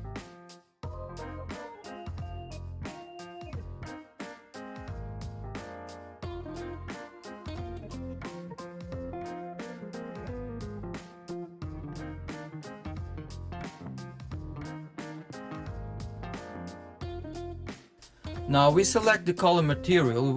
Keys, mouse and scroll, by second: 0.6 scroll up 3, 2.2 click, 7.2 shift+d, 11.7 shift+d, 13.4 shift+d, 14.5 shift+d, 17.8 click, 19.8 click.